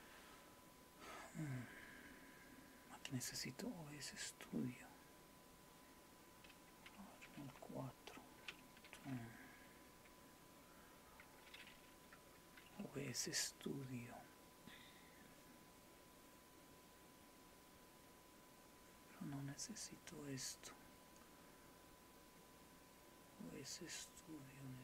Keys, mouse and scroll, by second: 11.4 s.